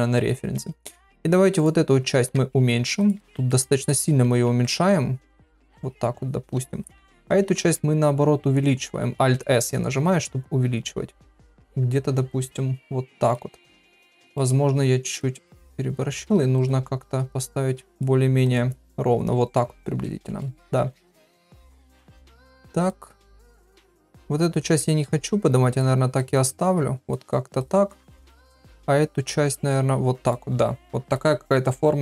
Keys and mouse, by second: 1.5 click, 2.1 alt+s, 3.3 shift+middle click, 4.5 alt+s, 6.8 click, 7.1 middle click, 7.6 alt+s, 14.3 shift+middle click, 14.7 g, 15.7 g, 16.5 click, 16.7 g, 18.6 g, 20.2 shift+middle click, 20.9 click, 21.8 click, 21.9 g, 23.4 g, 24.6 click, 26.2 click, 26.3 g, 28.2 click, 28.4 g.